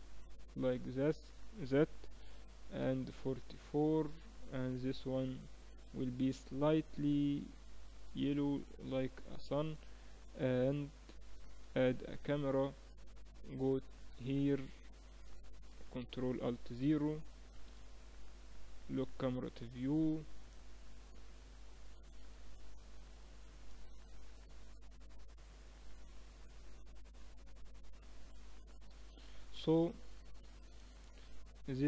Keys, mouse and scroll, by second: 0.6-2.3 drag, 1.9 4, 3.5-4.9 right drag, 4.9-5.9 middle drag, 5.9-7.1 drag, 8.9 ctrl+s, 9.9 middle click, 11.4 shift+a, 14.3-15.5 middle drag, 15.5 ctrl+alt+KP_0, 17.1 n, 18.1-20.3 drag, 20.3-22.8 middle drag, 23.9-28.9 middle drag, 28.9 n, 29.9 ctrl+s, 30.9-31.8 drag.